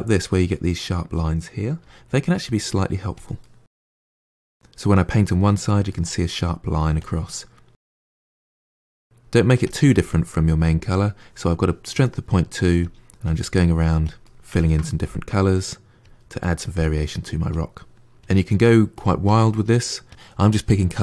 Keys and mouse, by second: 1.6 f, 2.2 middle click, 3.0 click, 3.3-5.4 middle drag, 5.8-6.8 middle drag, 6.8 click, 7.2-8.2 middle drag, 8.2 click, 8.4 middle click, 8.7 click, 8.8 middle click, 9.5 click, 10.1-12.7 middle drag, 12.7 click, 13.1 click, 13.4 middle click, 13.9 click, 14.1 middle click, 14.6 click, 15.0 ctrl+middle click, 16.0 middle click, 16.2 click, 16.3 middle click, 16.6 click, 16.7 middle click, 17.0 click, 17.8 middle click, 18.0 click, 18.4 middle click, 18.7 click, 18.8 middle click, 19.0 click, 19.4 middle click, 19.8 click.